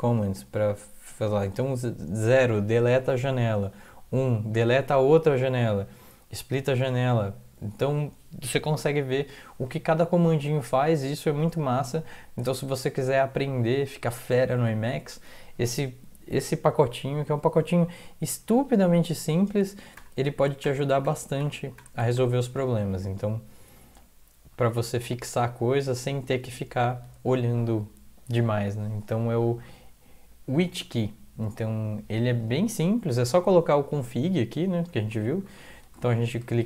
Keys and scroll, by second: 20.0 ctrl+=, 20.6 ctrl+=, 21.0 ctrl+=, 21.4 ctrl+=, 21.8 ctrl+=, 22.0 ctrl+=, 22.2 ctrl+=, 22.9 Down, 23.4-24.5 Down, 25.1 Up, 25.3 Up, 25.5 Up, 25.6 Up, 25.9 Down, 26.8 Down, 34.8 Up, 36.1 ctrl+shift+Left.